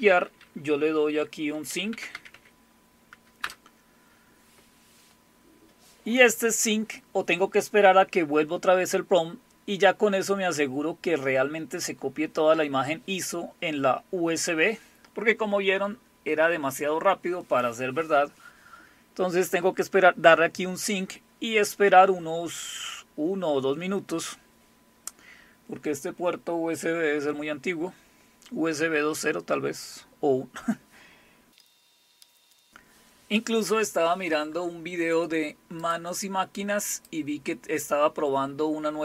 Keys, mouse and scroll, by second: 1.4-2.8 typing, 3.4 Return, 35.8 click, 36.2 click, 37.0 click.